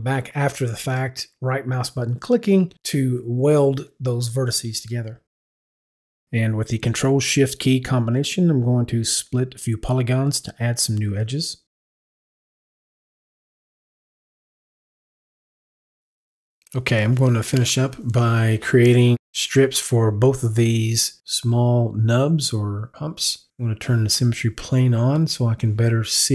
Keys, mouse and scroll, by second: 1.0 right click, 3.4 right click, 4.9 right click, 5.6 right click, 10.2 ctrl+shift+click, 12.1 click.